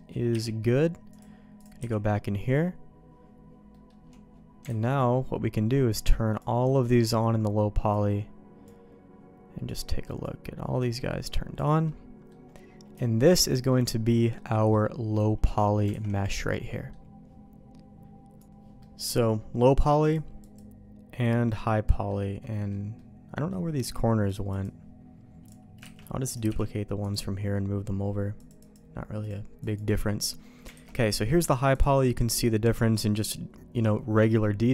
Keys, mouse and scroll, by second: 0.3 h, 1.1 click, 1.6 click, 1.8 h, 3.7 middle click, 4.6 alt+a, 5.9 click, 7.9 click, 9.6 click, 10.8 click, 11.8 middle click, 13.0 shift+middle click, 13.7 middle click, 14.6 middle click, 15.4 middle click, 16.0 alt+a, 16.1 middle click, 18.5 Delete, 18.5 ctrl+z, 18.8 middle click, 20.0 click, 20.4 click, 21.8 middle click, 22.4 middle click, 22.9 middle click, 24.2 click, 25.4 click, 26.0 shift+d, 26.5 m, 28.3 click, 29.2 click, 30.4 middle click, 30.7 alt+a, 30.8 middle click, 31.7 click.